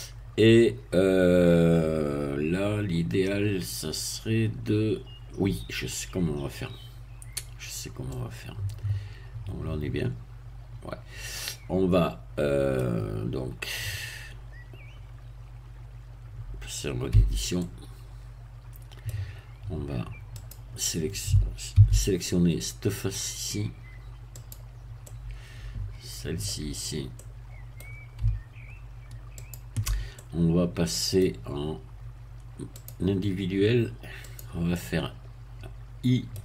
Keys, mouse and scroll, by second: 8.1-13.1 middle drag, 17.1 Tab, 17.5-19.5 middle drag, 20.4 click, 21.7 a, 24.4 click, 25.0-26.9 middle drag, 26.9 scroll up 1, 27.1-28.2 middle drag, 29.4 shift+click, 30.1-31.3 shift+middle drag, 32.7 click, 34.3 click, 34.7-36.4 middle drag.